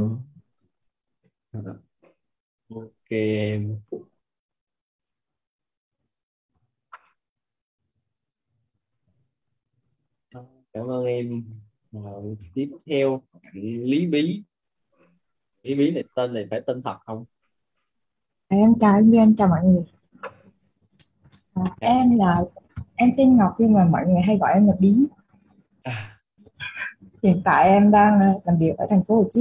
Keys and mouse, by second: 4.4 click, 7.3-10.1 typing, 12.1 click.